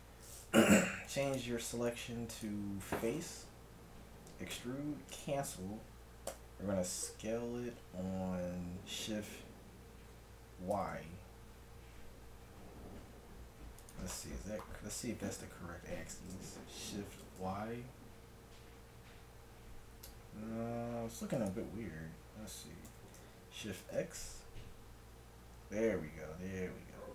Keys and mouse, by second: 0.8 ctrl+Tab, 4.6 e, 6.4 s, 14.5-17.2 middle drag, 16.1 s, 22.9 s.